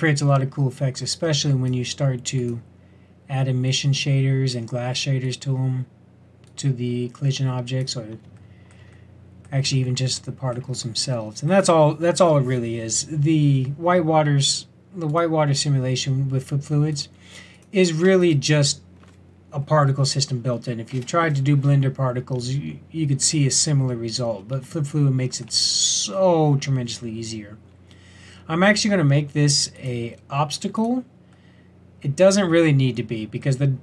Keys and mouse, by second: 15.0-17.0 drag, 29.7-31.3 drag.